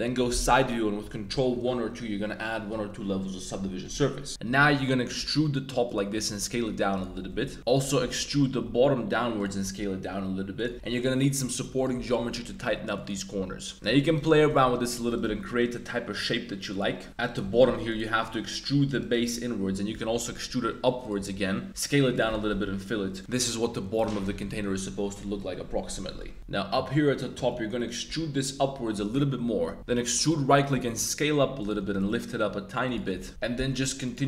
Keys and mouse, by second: 0.3 KP_3, 1.2 super+1, 1.5 super+2, 4.3-9.6 typing, 5.9 click, 6.9 click, 7.6 alt+click, 7.8 shift+click, 9.4 click, 10.5 click, 10.7 super+r, 11.7 click, 12.0 super+r, 13.3 Tab, 13.7 super+click, 14.0 alt+click, 14.3 g, 14.5 g, 14.9 click, 15.0 e, 15.3 s, 16.7 click, 17.5 g, 17.7 z, 17.9 click, 18.0-18.6 middle drag, 18.8 alt+1, 19.0 alt+click, 19.9 e, 20.3 z, 21.1 s, 22.1 click, 22.3 f, 22.5 Tab, 22.6-23.2 drag, 24.0 Tab, 24.3 click, 26.0 Tab, 26.2 drag, 26.4 g, 27.3 e, 28.0 z, 29.0 click, 29.8 e, 30.7 s, 31.6 click, 31.8 g, 31.9 z, 32.8 shift+click, 33.0 shift+middle click, 34.0 click.